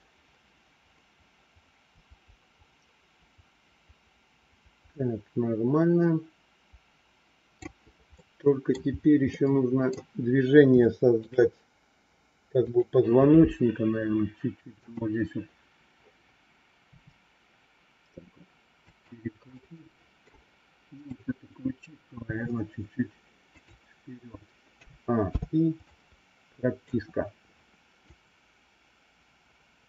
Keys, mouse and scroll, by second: 8.1 middle click, 9.2 middle click, 10.7 shift+middle click, 12.6 click, 14.8 click, 16.8 r, 19.6 middle click, 20.9 click, 22.1 r, 24.7 a, 25.2 i, 25.9 middle click, 28.2-29.8 drag.